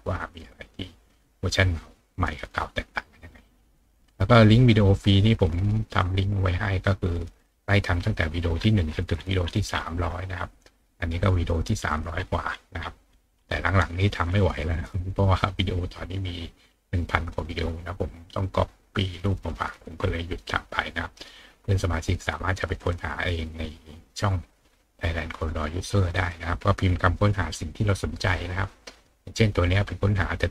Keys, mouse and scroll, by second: 3.5 click, 8.5-9.0 scroll down 4, 9.4-10.4 scroll down 4, 11.2 click, 12.1-13.9 scroll down 5, 13.9-14.5 scroll up 1, 18.0 scroll up 1, 19.0 middle click, 19.0-19.4 scroll up 2, 19.4 scroll down 2, 20.0 scroll down 2, 21.1 scroll up 2, 26.1 click, 28.0 click, 30.0 click.